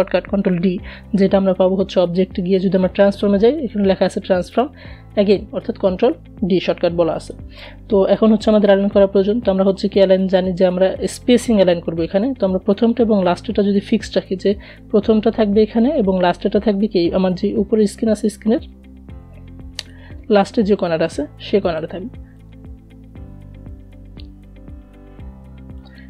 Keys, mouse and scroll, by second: 2.5 click, 5.5 click, 5.6 click, 10.2-19.2 drag, 19.2-19.6 alt+scroll up 1, 20.7-25.4 drag.